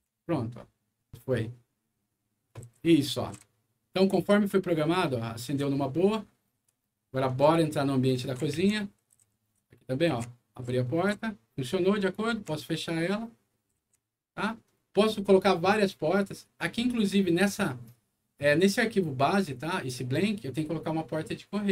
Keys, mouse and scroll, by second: 2.4-3.2 typing, 2.9 click, 5.5 w, 7.4 a, 8.5-12.2 typing.